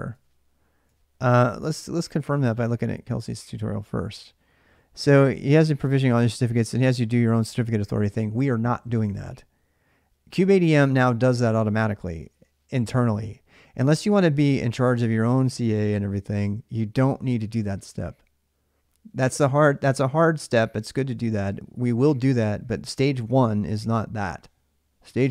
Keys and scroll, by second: 0.7 alt+Tab.